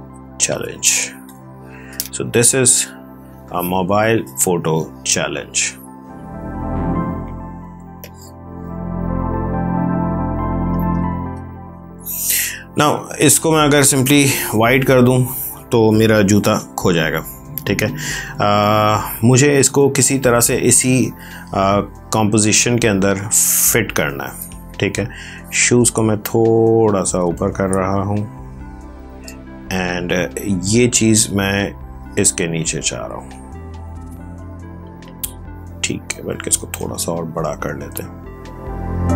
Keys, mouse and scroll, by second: 0.0-0.6 typing, 2.9 ctrl+t, 4.5 click, 7.9 click, 13.6 click, 13.9 ctrl+BackSpace, 20.2 v, 21.0 click, 25.0 click, 31.8 click, 36.2 ctrl+t, 37.7 click.